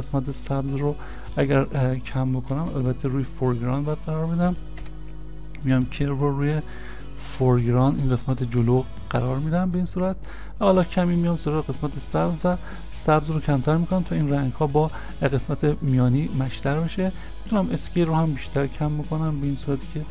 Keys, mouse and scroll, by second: 2.5 e, 2.5 v, 2.6 ctrl+z, 4.8 Delete, 17.4 Delete, 17.5 s.